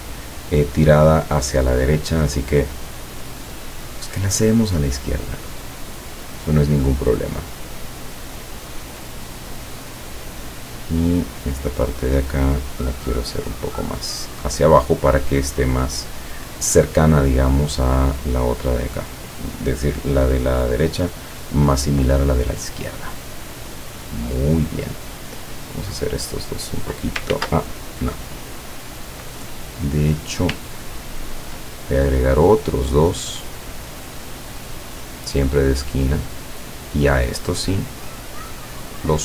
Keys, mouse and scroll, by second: 2.9-10.4 drag, 10.8 click, 12.1-14.6 drag, 25.0 click, 25.9-27.2 drag, 27.4 ctrl+z, 30.8-31.5 ctrl+scroll up 4, 32.4 click, 33.8 click, 35.0-36.4 drag, 37.4-39.2 drag.